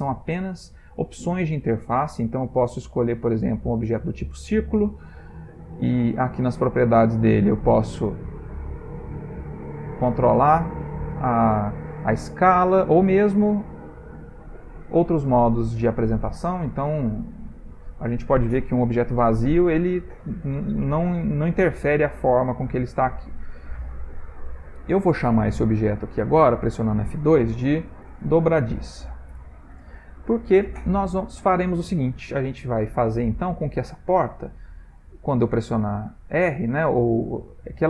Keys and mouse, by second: 6.1 click, 8.7 click, 12.4 click, 15.9 click, 21.8 middle click, 24.9 shift+middle click, 25.9 F2, 32.6-33.2 ctrl+middle click, 32.8 ctrl+middle click, 34.0 click.